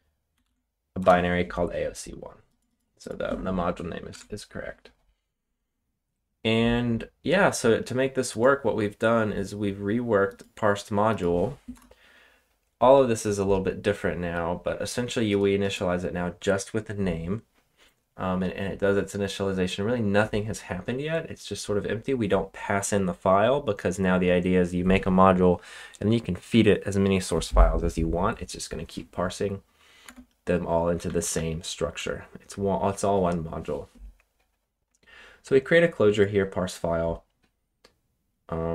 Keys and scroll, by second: 0.0-0.9 typing, 1.0 Return, 4.1 super+Tab, 11.7 Return, 30.0-32.4 typing.